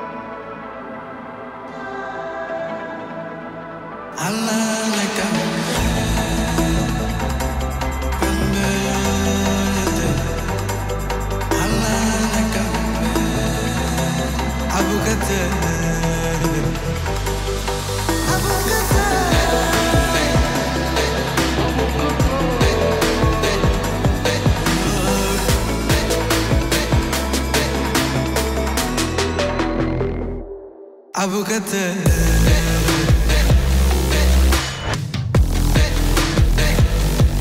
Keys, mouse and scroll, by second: 1.0-1.9 typing, 6.0 right click, 6.6-8.9 drag, 10.1 right click, 11.0 click, 12.6-13.5 typing, 13.9 Return, 15.2 click, 15.7 space.